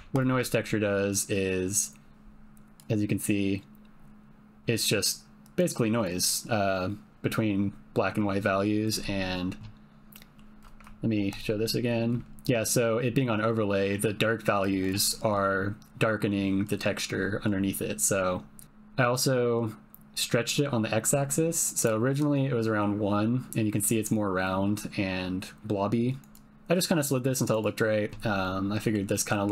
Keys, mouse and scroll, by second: 0.1 ctrl+shift+click, 2.9-5.4 drag, 10.1 middle click, 11.3 ctrl+shift+click, 13.5-14.9 drag, 17.8 middle click, 20.2-21.8 drag, 26.0 click, 26.5-27.7 drag, 28.5 middle click, 29.1 middle click.